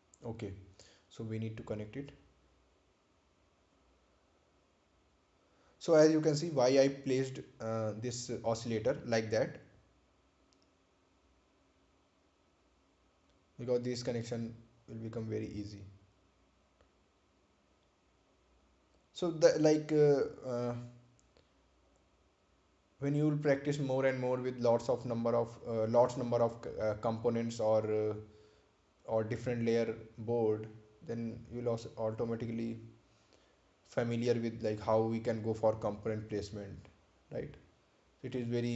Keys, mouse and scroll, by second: 0.1 ctrl+click, 15.3 click, 21.2 click, 23.8 click, 26.1 click, 28.3 right click, 28.9-29.2 scroll down 1, 33.1 click, 38.1 click.